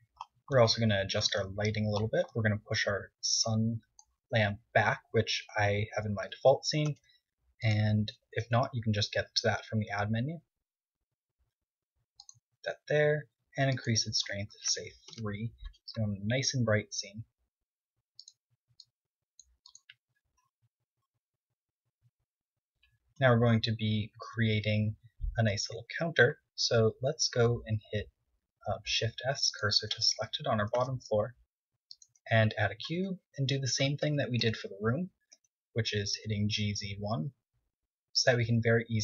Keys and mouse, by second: 2.1-3.0 right drag, 3.1 right drag, 4.3-5.5 drag, 5.5 KP_1, 6.6 KP_3, 7.7 r, 8.5 click, 9.0 g, 11.3 g, 13.1-16.1 drag, 17.2 KP_0, 24.8 z, 26.2-28.1 right drag, 28.4 Tab, 29.5 shift+s, 30.5 Tab, 31.4 shift+a, 33.1 KP_1, 33.6 Tab, 34.1 g, 35.8 s, 38.9 Tab, 38.9-39.0 drag.